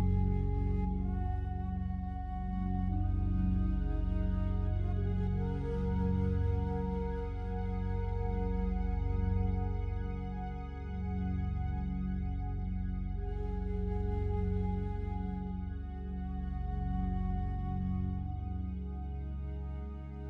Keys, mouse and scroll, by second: 1.1 click, 2.0-7.4 alt+drag, 7.4 z, 8.4 z, 9.3 click, 14.4 a, 15.9 a, 16.1 shift+right click, 17.1 3, 18.0 right click.